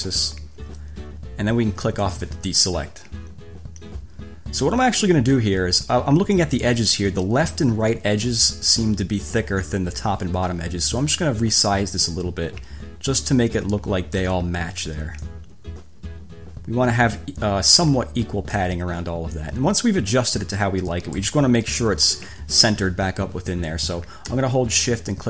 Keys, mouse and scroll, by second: 2.2 click, 11.1 click, 12.3 click, 15.5 click, 19.7 click.